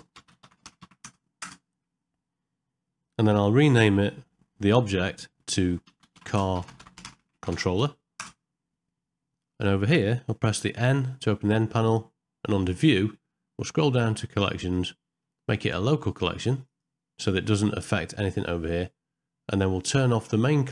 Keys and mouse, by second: 14.4 click, 16.7 click.